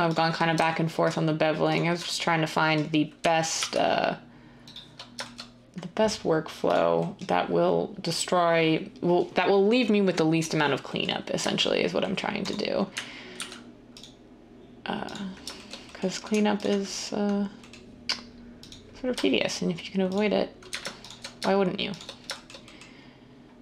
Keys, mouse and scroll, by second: 3.5 ctrl+b, 13.3 ctrl+r.